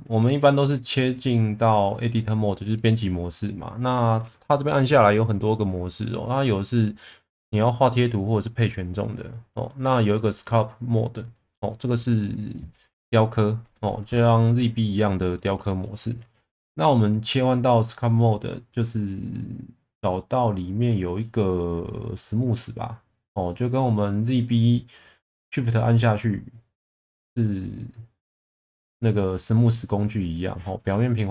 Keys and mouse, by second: 3.4-12.3 drag, 14.9 middle click, 15.6 shift+middle click.